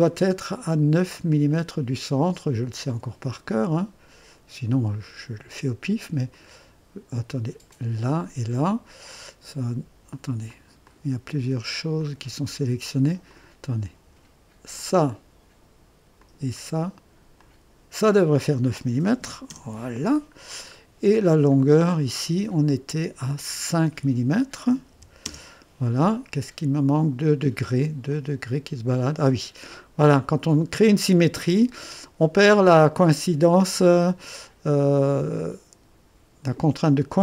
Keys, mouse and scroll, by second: 1.3 click, 6.3 click, 7.7 click, 9.1 click, 10.5 click, 10.9 click, 12.0 click, 13.3 click, 14.7 click, 16.2 click, 17.4 click, 19.0-19.7 typing, 20.4 scroll up 1, 21.8 click, 23.2 click, 24.9-25.6 typing, 28.1-30.6 drag, 28.5-29.3 typing, 37.1 click.